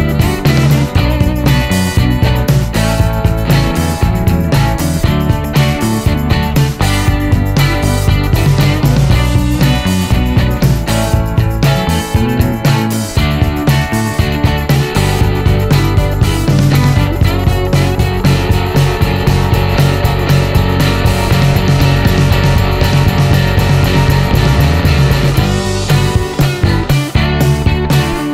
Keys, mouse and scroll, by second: 0.2 middle click, 0.7-1.4 scroll down 1, 1.7 click, 3.6 click, 5.4 click, 6.4 middle click, 7.9 click, 9.0 click, 10.1 middle click, 12.9 middle click, 14.6-15.0 scroll up 1, 15.0 scroll down 1, 15.1-15.5 scroll up 1, 15.5 scroll down 1, 15.6 middle click, 16.3-17.4 scroll down 1, 17.5 click, 18.6 click, 20.3 click, 21.7 click, 22.6-24.0 middle drag, 24.2 middle click, 25.6 click, 26.6 click, 27.1-27.5 scroll down 1, 27.5 middle click.